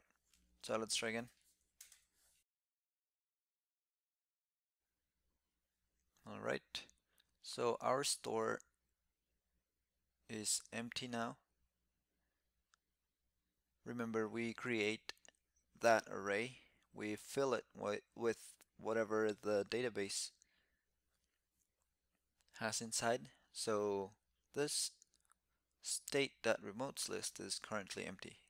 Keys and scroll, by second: 0.7 shift+super+t, 3.3 alt+super+i.